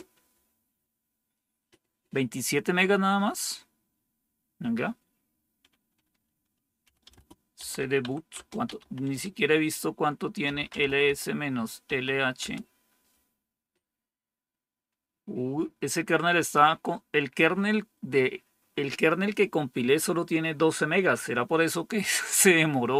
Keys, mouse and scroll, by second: 6.5-9.1 typing, 8.3 Return, 10.2-11.8 typing, 12.3 Return.